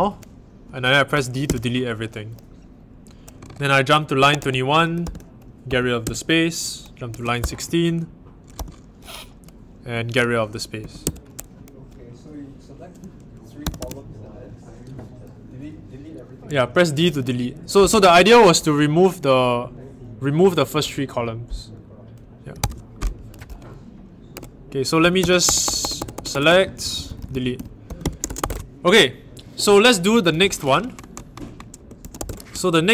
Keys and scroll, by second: 1.4 d, 3.9-7.5 typing, 10.5-11.5 typing, 13.4-14.2 typing, 22.5 super+Tab, 24.3-28.8 typing, 31.7-32.6 typing.